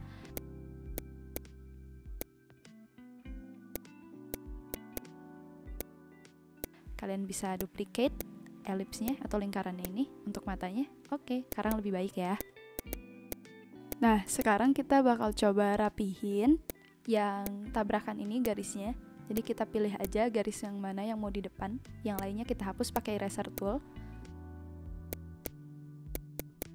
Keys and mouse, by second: 0.3 click, 0.9 click, 1.3 click, 2.1 click, 3.6 v, 3.7 click, 4.1 Delete, 4.3 click, 4.4 Delete, 4.7 click, 5.0 Delete, 5.7 click, 6.6 click, 7.4 v, 7.6 click, 8.1 alt+click, 9.0 click, 9.8 click, 11.4 click, 11.6 shift+click, 12.7 click, 13.8 click, 14.3 click, 16.6 click, 17.4 click, 18.4 click, 19.3 click, 20.0 click, 22.1 click, 22.9 click, 23.5 click, 25.1 click, 26.1 click, 26.2 v, 26.3 click.